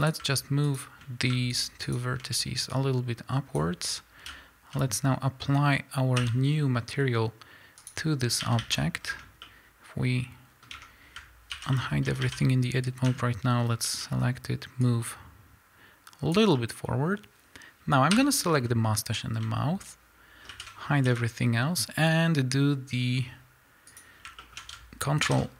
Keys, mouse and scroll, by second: 0.7 shift+click, 2.8-9.4 drag, 4.7 z, 6.2 l, 8.4 a, 9.0 scroll down 1, 9.1 Tab, 9.4-14.8 middle drag, 10.8 Tab, 11.5 alt+h, 12.1 a, 13.0 l, 13.6-14.0 scroll up 2, 14.8-16.5 drag, 16.5-23.9 middle drag, 18.6 l, 20.5 shift+h, 21.0 KP_1, 23.9 click, 24.4-25.5 shift+middle drag.